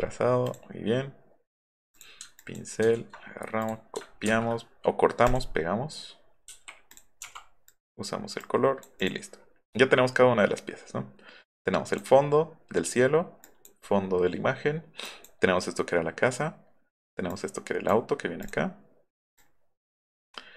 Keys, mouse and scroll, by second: 0.4 click, 2.8 ctrl+x, 3.6 click, 5.3 click, 6.9 click, 7.6 click, 8.4-8.8 drag, 9.0 click, 11.5 click, 13.4 drag, 15.1 drag, 17.3-17.9 drag, 18.4 click, 19.4-19.9 drag.